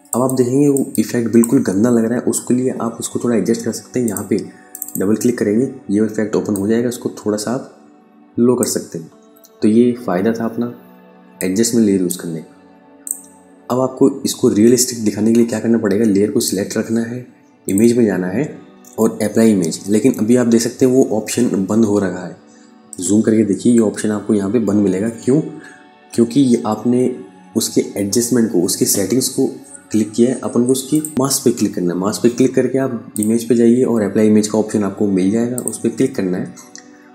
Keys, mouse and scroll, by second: 3.5 click, 10.8 click, 15.8 click, 22.5 super+Num_Lock, 22.8 KP_Add, 25.5 KP_Subtract, 30.4 click, 32.6 click, 35.6 click.